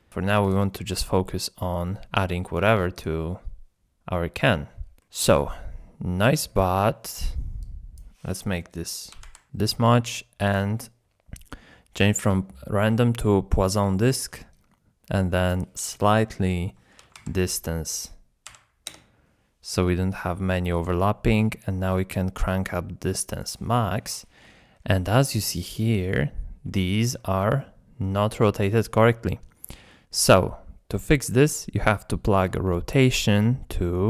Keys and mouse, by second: 0.5-0.8 drag, 1.0-1.7 middle drag, 3.0-4.6 drag, 5.0 middle click, 6.5-6.8 shift+drag, 7.7-10.2 drag, 10.6 click, 15.6-18.9 drag, 19.7 middle click, 21.3-23.2 drag, 23.7-24.1 middle drag, 25.3-25.7 shift+middle drag, 26.1-26.7 middle drag, 26.8 shift+middle drag, 27.5-28.1 middle drag, 30.0 middle click, 32.4 click, 32.8-34.0 drag.